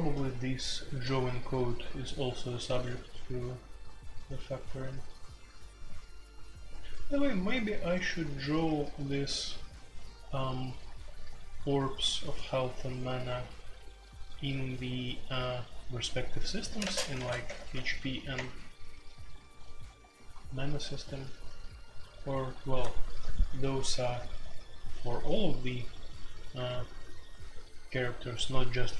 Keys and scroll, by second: 0.0-8.2 typing, 10.8 k, 16.8-17.7 typing, 18.3 Return.